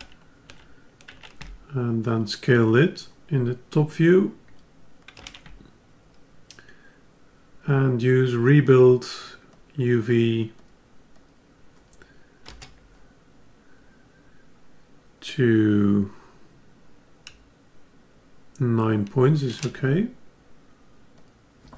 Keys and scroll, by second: 5.2 ctrl+Tab.